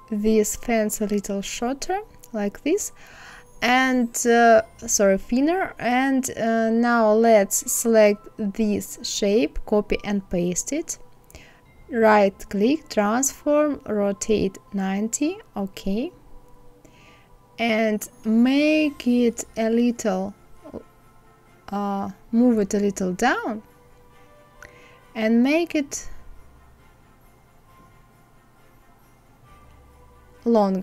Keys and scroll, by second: 8.4 ctrl+c, 9.1 ctrl+f.